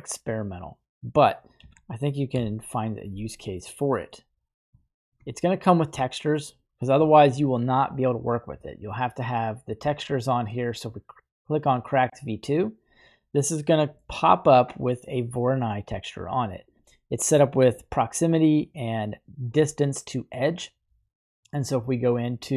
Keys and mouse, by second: 1.6 g, 2.3 y, 3.7-4.1 middle drag, 4.8-5.1 shift+middle drag, 5.2-5.7 middle drag, 6.6 middle click, 7.0 shift+middle click, 12.6 click, 13.5-14.0 middle drag, 17.4-17.8 middle drag, 21.9 click.